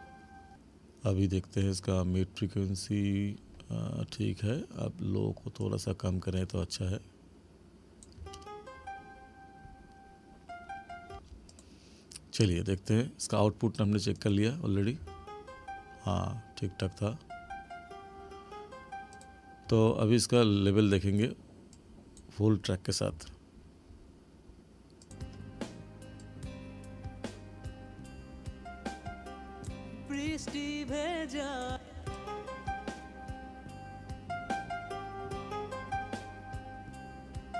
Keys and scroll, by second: 0.2 space, 8.2 space, 11.1 space, 15.0 space, 19.7 space, 23.1 space, 31.7 space.